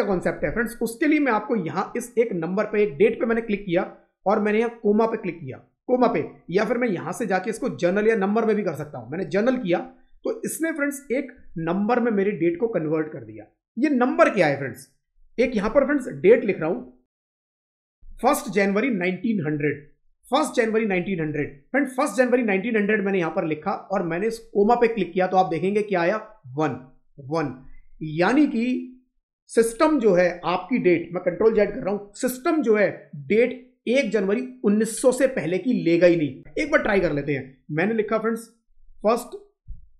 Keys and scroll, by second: 15.3 Right, 17.8 Up, 31.4 ctrl+z, 36.4 Up, 36.7 Down, 36.9 Right.